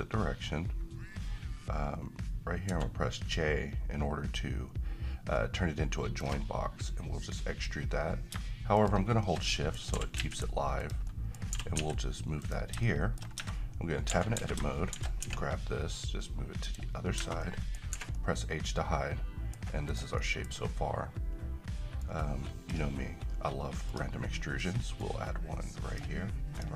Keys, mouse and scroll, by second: 2.7 alt+j, 8.8 click, 9.5 middle click, 9.9 g, 10.2 z, 10.8 click, 11.1 middle click, 11.5 g, 11.8 x, 12.4 click, 12.8-13.4 shift+middle click, 13.4 Tab, 14.1 a, 14.4 a, 15.0 d, 15.2 x, 16.6 click, 17.2 Tab, 17.4-18.0 middle click, 17.9 h, 18.1-19.7 middle drag, 19.9 click, 20.2 middle click, 20.5-22.0 scroll up 1, 22.0-22.9 drag.